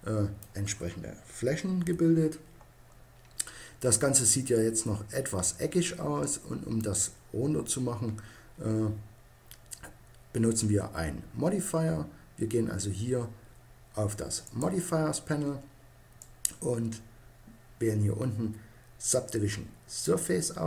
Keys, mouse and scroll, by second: 1.6 KP_1, 2.7-6.0 middle drag, 14.2-17.7 drag.